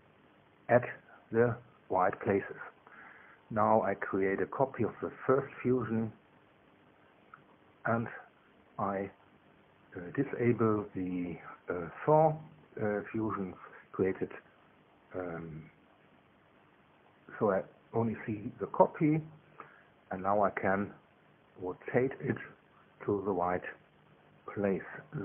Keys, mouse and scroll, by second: 0.0 click, 3.9 ctrl+c, 5.4 click, 6.4 ctrl+v, 7.6 click, 14.4 click, 14.7 space, 15.1 click, 15.5 space, 16.0 click, 16.2 space, 17.0 click, 17.2 space, 18.6 click.